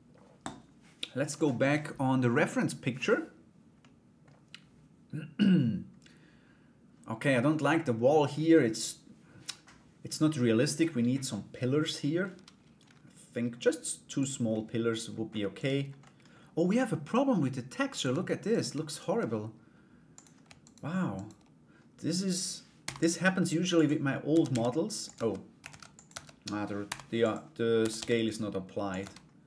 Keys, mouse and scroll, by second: 3.4 middle click, 13.7 click, 14.1 middle click, 15.1 right click, 15.6 middle click, 17.7 Tab, 18.1 right click, 18.4 alt+right click, 19.7 click, 20.2 alt+right click, 20.7 alt+right click, 23.9 a, 24.1 s, 24.7 Tab, 25.2 ctrl+a, 25.7 Tab, 26.4 u, 27.4 a, 27.5 s, 28.6 Tab.